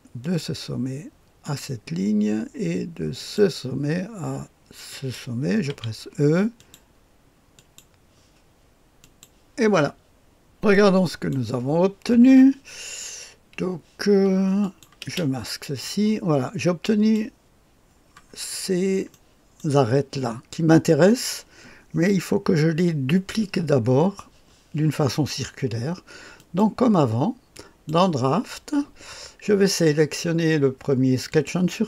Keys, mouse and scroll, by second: 0.2 click, 1.4 click, 3.1 click, 4.9 click, 5.7 e, 6.5 click, 7.5 click, 9.0 click, 10.5-11.3 drag, 14.6 click, 15.0 space, 15.8-17.1 drag, 19.1 middle click, 19.1-19.9 scroll up 1, 23.0-26.3 scroll down 1, 26.3 click, 27.5 click, 31.2 click.